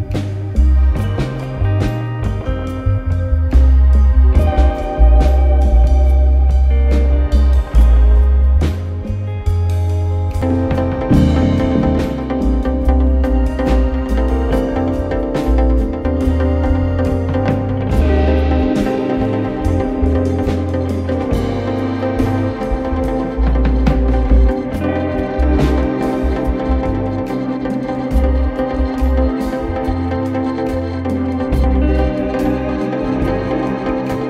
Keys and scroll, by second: 6.1 4, 7.8-8.8 typing, 21.5 4, 24.1 3, 25.3 ], 29.2 ctrl+d, 29.3 Escape, 31.6 ctrl+z, 33.0 F1, 33.0 F2.